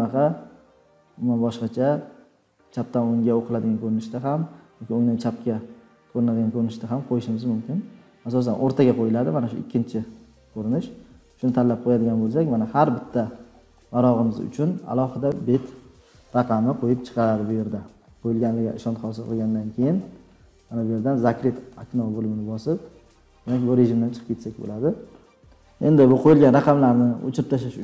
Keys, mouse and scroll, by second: 11.5 click, 12.3 scroll down 2, 13.0-14.5 scroll down 31, 14.7-15.1 scroll, 16.2-20.7 scroll, 21.8 click, 22.2 scroll, 25.6 scroll down 5.